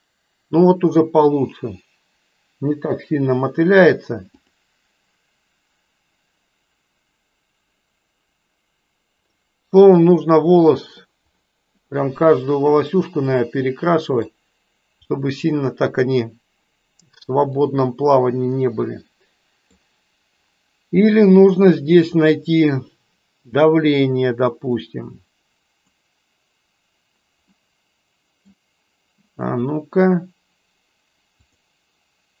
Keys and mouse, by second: 4.4 click, 10.1-11.2 middle drag, 13.1-14.4 middle drag, 15.1-16.1 middle drag, 17.7-19.7 middle drag, 23.4 click, 24.8-26.1 drag, 27.6-28.7 middle drag, 31.4 click.